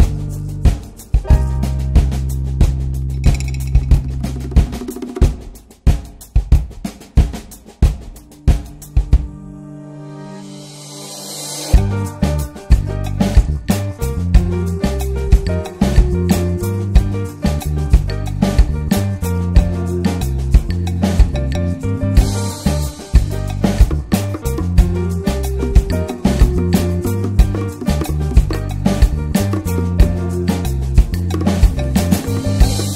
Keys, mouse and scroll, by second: 0.3 shift+middle click, 0.9-2.7 drag, 2.9-3.4 drag, 4.5-6.5 drag, 6.8 middle drag, 7.0 scroll down 1, 7.6 shift+middle click, 7.8-8.9 shift+scroll up 2, 8.0 middle click, 8.9-10.1 drag, 10.5 click, 10.8 click, 11.4 click, 11.6 shift+middle drag, 11.9 scroll down 2, 12.0 drag, 12.3-12.6 middle drag, 12.6 scroll up 1, 13.0 click, 13.3 Tab, 13.7 Tab, 13.9 Tab, 14.3 scroll up 1, 14.5 Tab, 14.8 drag, 15.0 Tab, 15.4 alt+middle click, 15.5 alt+z, 15.9 click, 16.2 l, 16.4 l, 16.7 scroll up 2, 17.2 click, 18.6 alt+z, 19.0 alt+z, 19.5 s, 20.2-20.5 scroll down 1, 20.5-21.0 scroll up 1, 21.0 click, 21.9 s, 23.4 alt+middle click, 23.5 alt+z, 24.1 click, 26.4 Tab, 26.5 click, 26.6 scroll down 3, 26.8 middle click, 26.9 click, 27.2-27.7 middle drag, 27.7 ctrl+s, 27.9 middle drag, 28.0 scroll up 2, 28.2-28.7 shift+middle drag, 28.7 ctrl+s, 28.8-29.9 alt+middle drag, 29.9 scroll up 1, 30.1 ctrl+s, 30.3 Tab, 30.6 click, 31.0 l, 31.4 alt+middle click, 31.8 s.